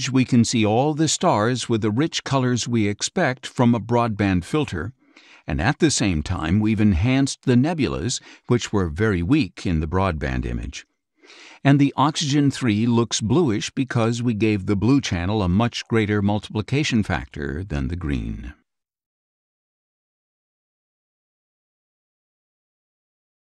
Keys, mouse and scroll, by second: 1.2 click, 2.4-4.1 drag, 4.4-5.5 drag, 6.4 click, 6.7-7.1 scroll up 3, 9.1 click, 10.1 scroll down 4, 10.6 click, 10.6 space, 13.1 click, 13.8 click, 14.1 scroll down 2, 14.5 click, 14.5 space, 18.9 scroll up 2.